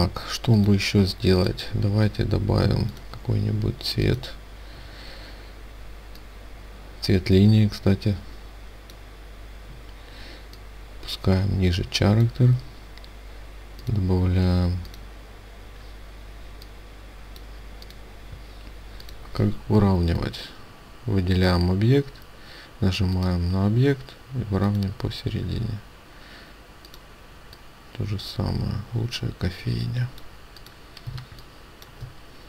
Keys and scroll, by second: 30.6 ctrl+space.